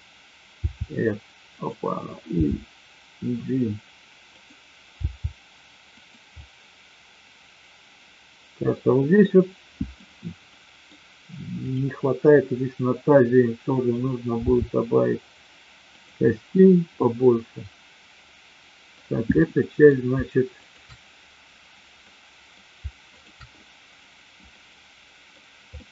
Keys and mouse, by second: 0.6 r, 1.5 click, 2.2 g, 4.3 click, 5.0 g, 6.3-8.6 middle drag, 9.3-9.9 middle drag, 10.5 middle click, 11.5-12.5 drag, 14.3 r, 16.2-18.9 middle drag, 19.4-19.8 middle drag, 20.5-21.5 shift+drag, 21.9-22.5 middle drag, 23.0 shift+click, 24.4-25.3 middle drag, 25.8-25.9 middle drag.